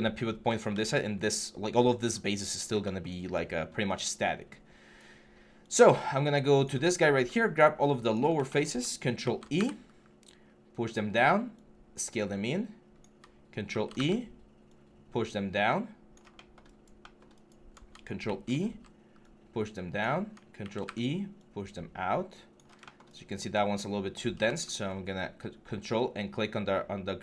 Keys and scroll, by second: 0.5 ctrl+z, 9.0 ctrl+e, 13.5 ctrl+e, 18.0 ctrl+e, 20.4 ctrl+e.